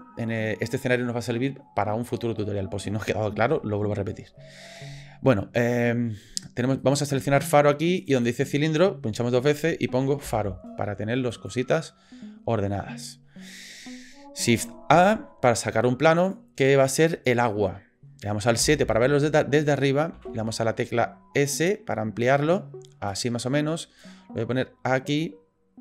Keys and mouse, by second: 6.8 middle click, 8.0 middle click, 8.1-11.5 middle drag, 14.9 shift+a, 16.8-17.3 drag, 18.6 KP_7, 20.1 s, 24.2-25.8 drag.